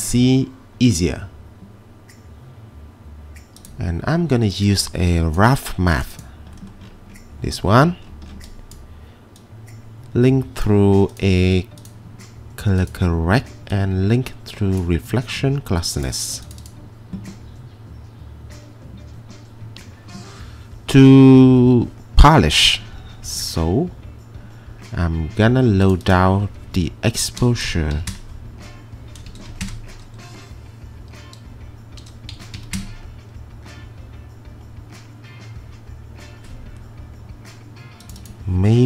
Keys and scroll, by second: 27.7-30.0 typing, 32.1-32.8 typing.